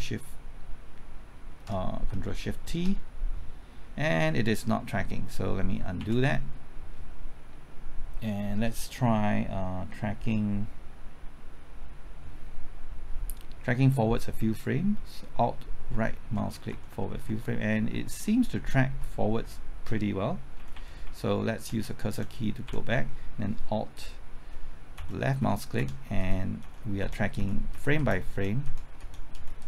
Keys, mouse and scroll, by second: 2.6 ctrl+shift+t, 6.0 ctrl+z, 15.9 alt+Right, 16.4-17.3 typing, 20.6 Left, 20.7-21.8 typing, 23.7-27.5 typing, 24.9 alt+Left, 25.8 alt+Left.